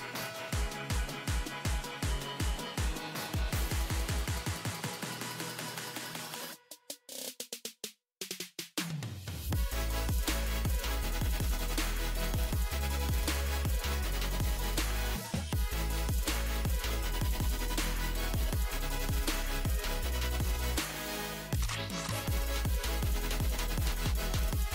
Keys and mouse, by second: 0.4 c, 8.3-10.9 right drag, 12.8-16.0 middle drag, 14.1 z, 17.6 z, 19.2 c, 22.4-24.7 drag.